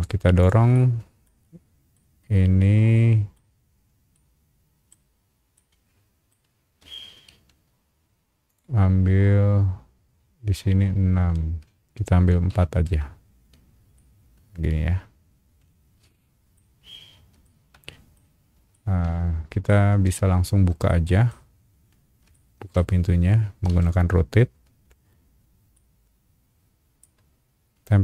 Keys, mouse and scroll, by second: 0.4 click, 0.7 shift+middle click, 1.4-1.8 scroll up 2, 1.9-3.3 shift+middle drag, 3.5-3.9 scroll up 2, 4.1 shift+middle click, 4.9-5.4 scroll up 2, 5.5 shift+middle click, 7.3 m, 8.5 click, 12.5 KP_4, 12.8 KP_Enter, 13.9-16.5 middle drag, 16.8-17.3 scroll down 2, 17.4 shift+middle click, 18.7 shift+middle click, 19.9 scroll down 1, 20.1 space, 20.9 shift+middle click, 21.5-22.0 scroll up 2, 22.3 shift+middle click, 23.2 scroll up 1, 23.7 q, 24.8-25.2 scroll up 3, 25.7-27.0 middle drag, 27.2 scroll up 2.